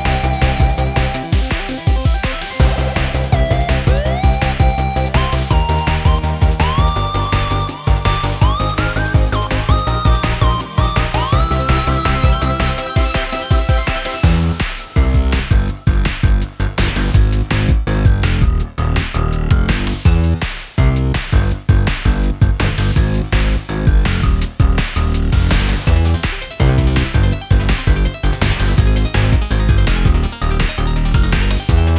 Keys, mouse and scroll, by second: 1.7 click, 2.3-10.2 drag, 11.7-12.5 scroll down 2, 12.5-14.1 drag, 15.1 click, 16.4 click, 16.7 right click, 17.4 click, 17.8 scroll up 1, 18.0-21.0 middle drag, 21.5 click, 22.5 scroll up 2, 22.7 scroll down 4, 23.2-24.5 middle drag, 24.5 ctrl+r, 27.4 scroll up 2, 28.0-30.0 middle drag, 30.0-30.5 scroll down 1, 30.5-31.7 middle drag, 31.7-31.9 scroll up 1.